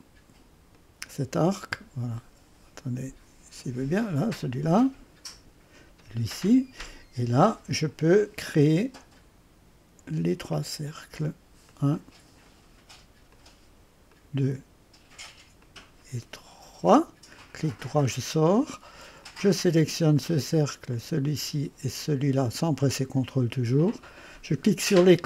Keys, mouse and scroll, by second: 0.7 click, 3.6 click, 5.3 click, 8.5 click, 10.5 click, 11.7 click, 13.3 click, 13.8 click, 14.2 click, 15.6 click, 16.4 click, 17.5 click, 17.5 middle click, 17.5 right click, 19.2 click, 20.9 click, 22.2 click.